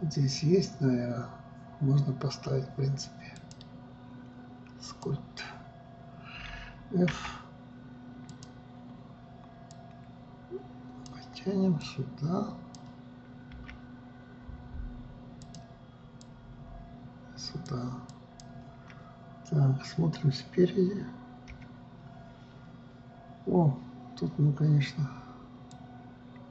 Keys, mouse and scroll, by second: 3.9-7.0 drag, 10.3-14.1 drag, 14.1 f, 16.8-21.8 drag, 22.1 KP_1, 26.3-26.5 drag.